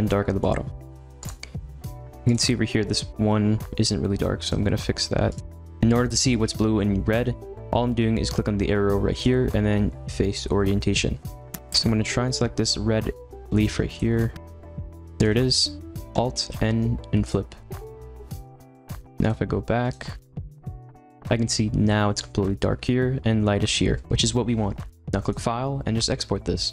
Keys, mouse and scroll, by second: 0.4-1.2 middle drag, 1.2 click, 2.3-4.5 drag, 5.3 click, 11.6 l, 13.2 g, 13.7 ctrl+z, 13.9 click, 14.1 middle click, 14.7 l, 14.9 middle click, 15.0 g, 15.3 ctrl+z, 17.3 alt+n, 17.6-19.0 middle drag, 19.0 click, 20.7-21.1 drag.